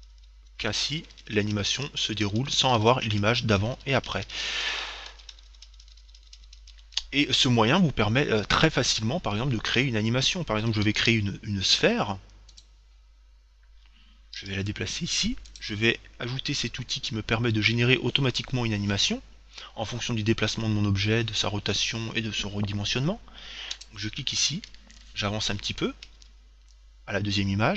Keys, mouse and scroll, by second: 0.8 Right, 2.2 Left, 3.7 Right, 5.4 Left, 11.1 shift+a, 14.6 g, 15.8-17.6 drag, 24.0-25.7 drag, 25.8 Right, 25.8 click.